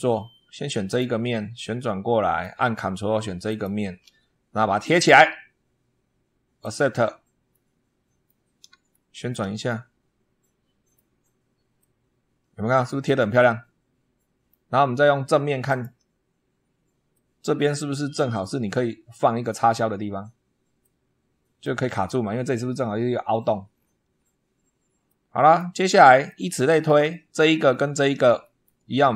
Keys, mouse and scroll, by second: 0.7 click, 1.4-2.4 middle drag, 3.3 ctrl+click, 4.8 click, 6.4 click, 7.4-8.3 middle drag, 8.8 shift+middle click, 9.5-11.0 shift+middle drag, 11.0 scroll up 1, 11.6-14.5 middle drag, 15.5 click, 17.0-17.5 shift+middle drag, 17.4 shift+click, 17.6 shift+scroll up 2, 20.6-21.6 drag, 23.6-24.2 scroll down 4, 24.9 click, 26.1 shift+click, 28.3 shift+click, 28.5 shift+scroll down 1.